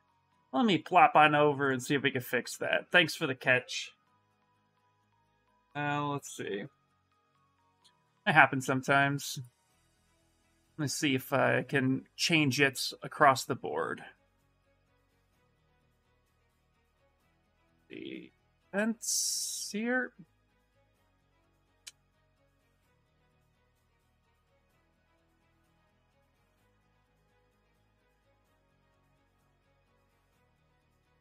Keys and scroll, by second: 4.0 r, 4.3 s, 4.9 t, 6.3 Return.